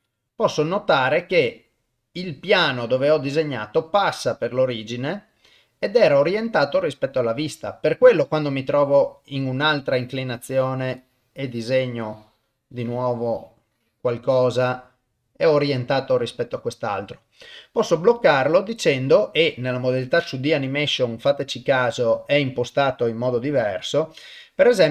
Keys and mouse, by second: 0.6-8.8 middle drag, 9.8-14.1 drag, 14.6-17.5 middle drag, 18.2-24.9 drag.